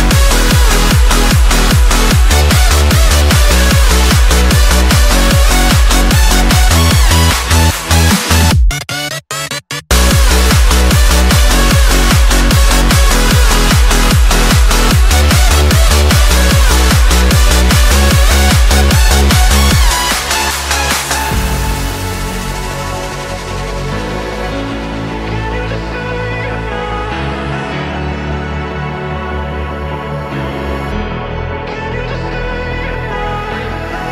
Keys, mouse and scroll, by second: 2.5 ctrl+r, 4.6 click, 6.1 m, 6.8-9.0 shift+middle drag, 9.0 click, 10.0-12.8 drag, 12.8 d, 16.6 click, 17.0 s, 19.6 alt+click, 20.1 s, 21.7 alt+click, 22.1 s, 24.5 alt+click, 25.1 click, 25.6 s, 26.8 click, 27.4 s, 30.5 click, 31.1 s.